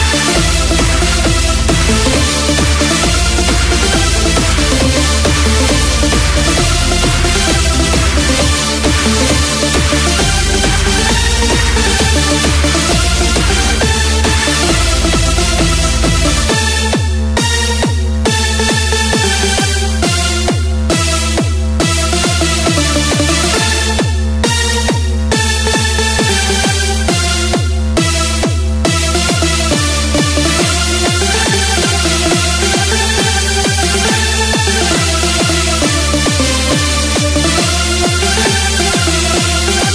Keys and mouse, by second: 1.3 KP_6, 6.6-9.3 drag, 9.3 KP_1, 10.6 s, 14.6 click, 15.9 KP_8, 18.6-21.2 drag, 23.2 click, 28.6 KP_4, 29.9 KP_2, 34.6 click.